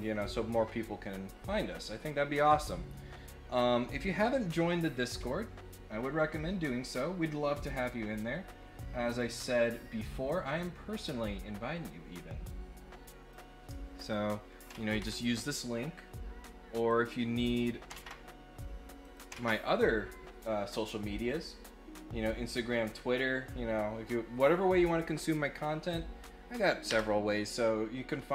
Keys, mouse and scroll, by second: 6.8 click, 9.2 click, 10.2 click, 10.9 right click, 13.3 click, 14.0 click, 16.8 click, 19.0 click.